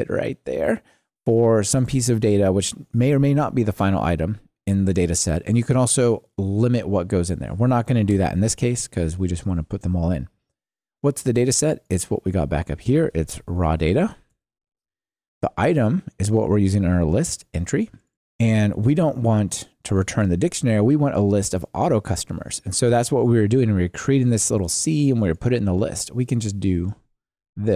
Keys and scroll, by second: 14.3 Return.